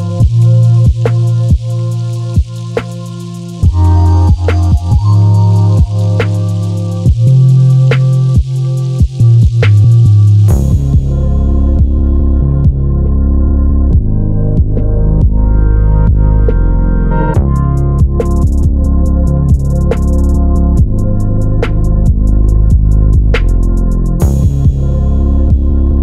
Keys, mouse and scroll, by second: 0.5-1.7 middle drag, 1.7 click, 2.3-4.0 drag, 5.0-6.4 drag, 8.2 h, 8.6 click, 8.8 h, 9.4 click, 9.9 click, 10.0-15.0 middle drag, 15.0 click, 15.3-17.0 middle drag, 18.2-18.7 scroll up 2, 18.4 middle click, 18.5 click, 19.1 Tab, 19.3 click, 19.6 middle click, 20.0 click, 20.4 Delete, 21.2 click, 21.5 Delete, 22.4-26.0 middle drag.